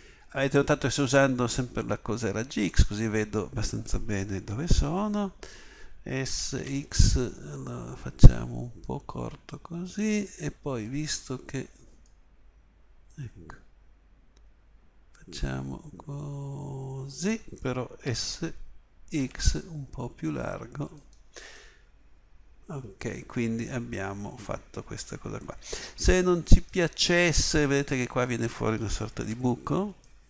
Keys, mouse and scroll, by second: 6.3 s, 11.2-14.2 middle drag, 18.1 s, 29.2 z.